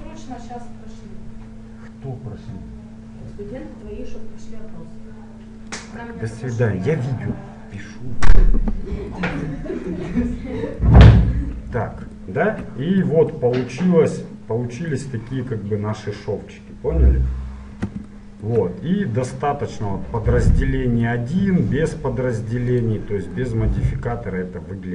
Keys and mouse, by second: 9.3-10.9 middle drag, 13.7-18.1 middle drag, 18.3-22.9 middle drag, 22.9-24.4 drag, 24.4 middle click.